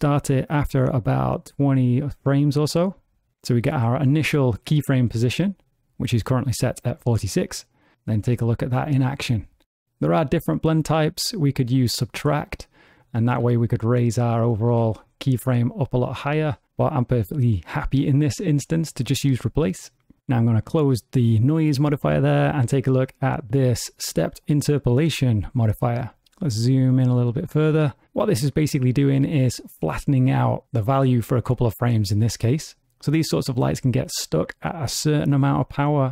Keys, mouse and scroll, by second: 3.3 click, 7.5 space, 10.7 click, 13.4 g, 14.6 g, 16.6 click, 20.6 click, 22.0 click, 23.5 click, 26.2 ctrl+middle click.